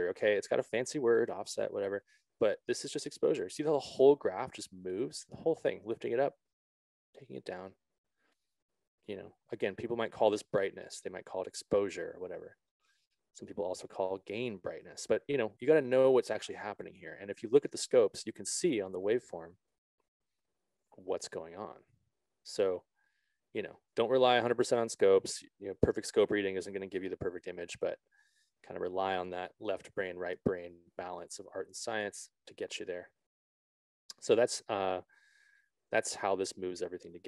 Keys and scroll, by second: 16.5 z.